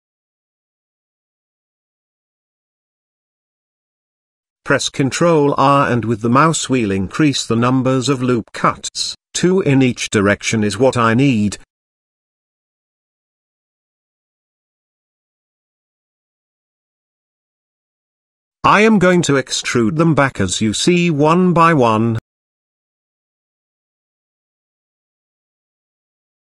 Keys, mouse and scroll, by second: 0.2 g, 1.5 middle click, 2.0 z, 2.8 middle click, 3.1 shift+middle click, 4.3 ctrl+r, 8.3 ctrl+z, 8.3 ctrl+r, 11.7 ctrl+r, 15.1 click, 15.6 click, 16.4 shift+click, 17.2 i, 20.0 i, 20.9 click, 21.7 i, 23.0 middle click, 23.5 shift+middle click, 24.3 i.